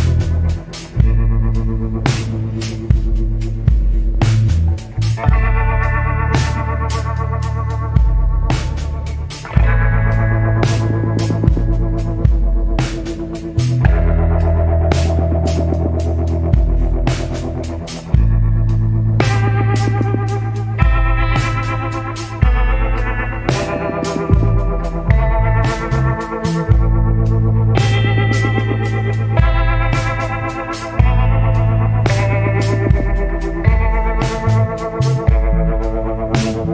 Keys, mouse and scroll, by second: 8.0 scroll down 1, 9.8 scroll up 1, 12.7 scroll down 1, 14.9 scroll up 1, 17.6 scroll down 1, 19.8 scroll up 1, 22.0 scroll up 1, 33.7 scroll down 1.